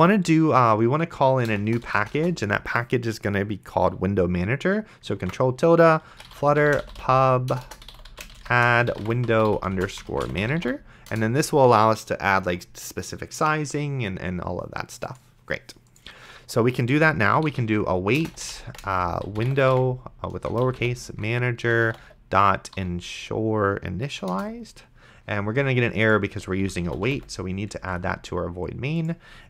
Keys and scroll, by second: 1.8 BackSpace, 5.5 ctrl+`, 5.9-11.4 typing, 17.6-22.7 typing, 24.1 Down, 24.3 Return, 26.3-27.8 typing.